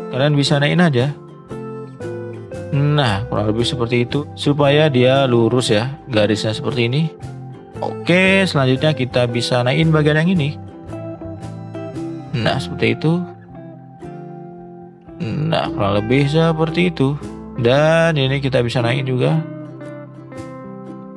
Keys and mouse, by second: 1.4-4.2 drag, 4.2 shift+middle click, 7.8 middle click, 8.5 shift+middle click, 9.0 middle click, 11.9 alt+shift+click, 13.0 click, 14.3-15.7 drag, 16.5 middle drag, 17.9 click, 18.4 click, 19.2 click, 20.2 shift+middle click.